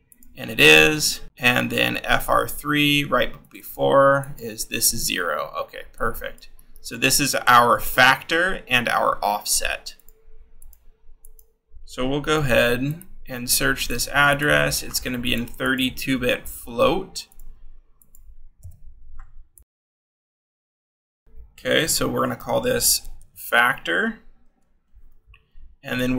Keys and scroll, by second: 7.2 ctrl+c, 9.6 c, 13.4 ctrl+v, 19.5 k, 21.9-24.4 typing.